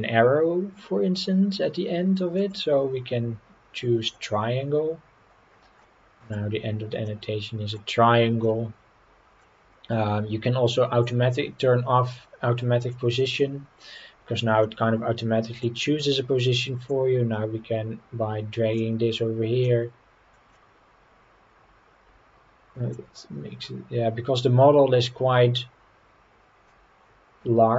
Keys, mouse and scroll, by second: 2.4-5.1 drag, 5.8-6.3 middle drag, 7.0-7.7 middle drag, 8.4-9.4 middle drag, 13.8 click, 14.6-15.6 middle drag, 16.9-18.8 drag, 19.6-21.8 drag, 22.9-26.8 drag.